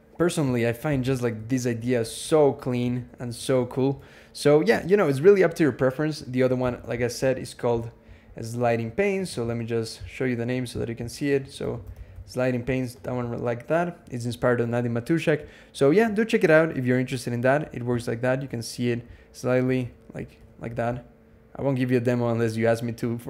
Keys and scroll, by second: 0.7 alt+x, 1.3 ctrl+Tab, 1.6 ctrl+Tab, 2.1 ctrl+Tab, 2.2 ctrl+Tab, 2.4 ctrl+Tab, 3.0 ctrl+shift+Tab, 6.4 ctrl+,, 11.2-12.5 typing, 19.9 super+=, 20.0 super+=.